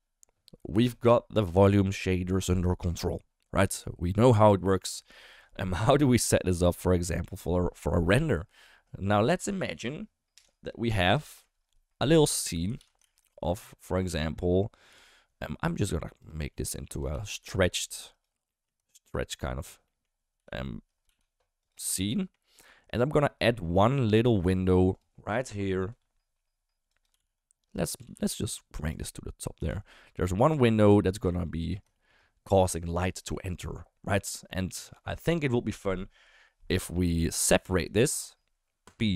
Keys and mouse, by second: 9.3 drag, 10.3 Delete, 11.2 shift+a, 12.8 ctrl+z, 13.0 shift+a, 14.9 g, 16.5 middle drag, 16.9 Tab, 17.1 a, 17.9 s, 18.5 middle click, 18.8 shift+middle click, 19.8 middle click, 21.1 s, 21.9 shift+middle click, 22.1 middle click, 23.2 ctrl+r, 24.8 3, 25.9 i, 27.1 g, 28.0 s, 29.6 g, 31.0 shift+middle click, 31.4 middle click, 31.9 shift+middle click, 37.5 p.